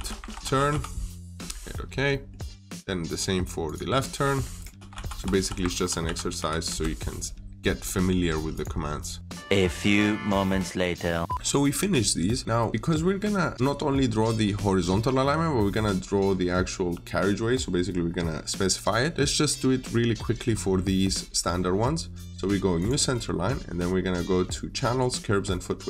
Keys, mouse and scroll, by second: 0.0-1.0 typing, 1.1 Return, 1.9 middle click, 2.9 click, 4.4-6.7 typing, 7.2 scroll down 1, 7.5 middle click, 8.4 click, 11.3 middle click, 12.7 scroll up 1, 13.9 scroll down 1, 14.0 middle click, 14.9 scroll down 1, 15.1 middle click, 21.3 middle click, 21.4-22.6 scroll up 1, 22.6 click.